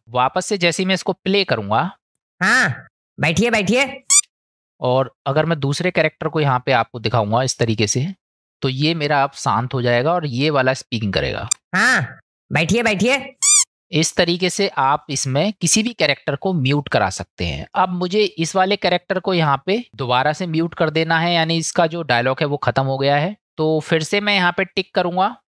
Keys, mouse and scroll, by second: 2.2 space, 4.2 space, 5.2 middle click, 6.8-7.5 middle drag, 8.1-8.4 shift+middle drag, 11.5 space.